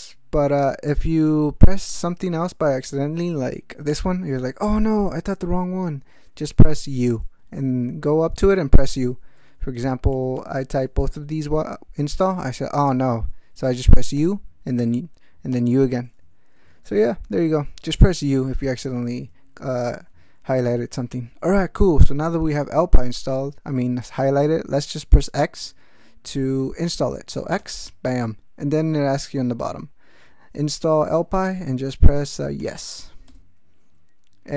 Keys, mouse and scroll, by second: 2.4 ctrl+p, 3.9 ctrl+i, 5.8 ctrl+p, 6.7 u, 7.6 ctrl+p, 9.1 ctrl+n, 10.1 i, 10.8 ctrl+p, 14.1 u, 15.5 u, 16.5 ctrl+p, 17.2 ctrl+n, 18.5 ctrl+n, 19.8 ctrl+f, 20.1 ctrl+a, 27.6 x, 32.3-33.2 typing, 33.3 Return.